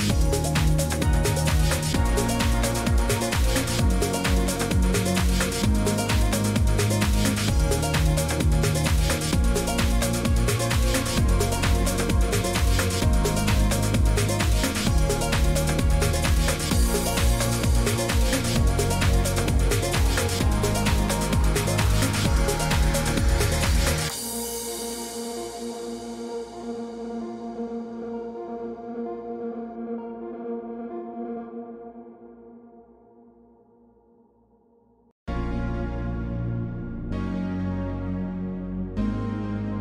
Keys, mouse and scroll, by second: 0.0-39.8 typing, 1.9 click, 6.8 click, 8.8 click, 11.1 click, 14.3 click, 17.2 click, 20.2 click, 23.2 click, 23.7 Escape, 24.9 click, 25.4 click, 27.1 click, 28.5 click, 29.9 click, 35.5 click, 36.2 click.